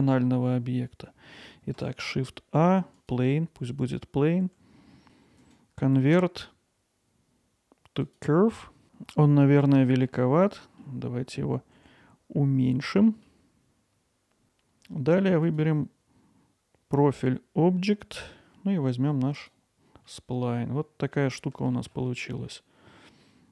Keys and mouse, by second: 5.4-8.2 right drag, 8.5-8.8 middle drag, 10.1 alt+middle click, 13.1-15.4 middle drag, 15.4 click, 20.2-21.2 alt+middle drag, 21.4-21.9 ctrl+alt+middle drag, 22.2-22.5 middle drag.